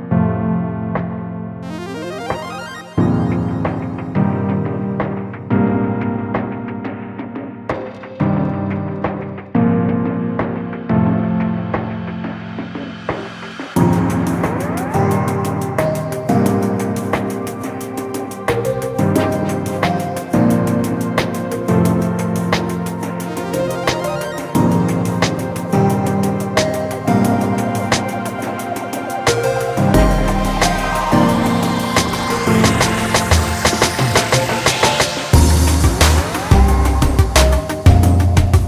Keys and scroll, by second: 7.1 ctrl+space.